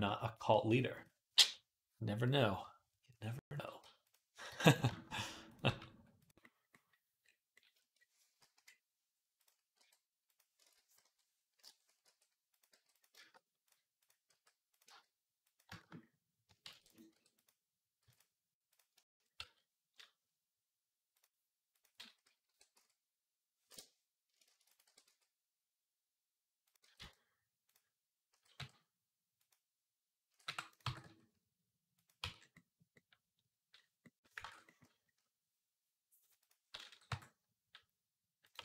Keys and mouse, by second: 0.3 g, 0.8-8.3 middle drag, 4.3 g, 5.3 click, 5.5 g, 8.3 KP_3, 8.5-12.3 middle drag, 9.2 click, 9.6 r, 10.4 ctrl+z, 10.8 ., 11.8 r, 12.5 g, 14.1 r, 14.7 g, 16.5 shift+d, 16.9 r, 17.8 x, 18.8 Tab, 19.2 a, 22.3 r, 24.3 shift+d, 24.6 r, 26.6 g, 28.1 s, 30.1 s, 30.4-33.2 middle drag, 30.6 g, 32.0 Tab, 34.3 ctrl+Tab, 34.5-38.6 drag, 36.9 r, 38.5 ctrl+r.